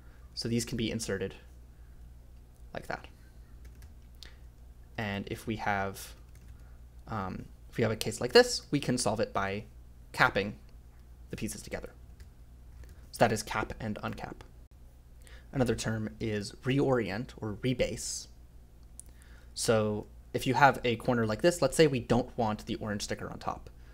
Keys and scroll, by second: 0.2 f, 1.9-7.2 typing, 8.6 i, 9.3 j, 9.5 j, 11.4-13.4 typing, 15.7-16.7 typing, 23.0 a.